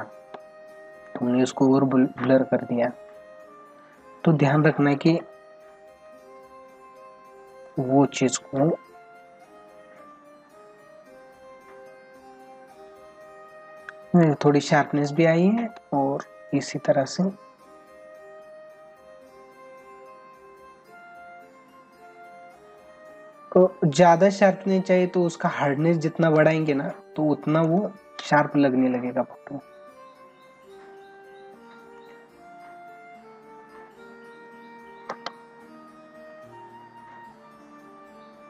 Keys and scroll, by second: 14.0 ctrl+=, 15.0 space, 16.2 ctrl+=, 26.2 ctrl+alt+z, 27.7 space, 35.1 ctrl+alt+z.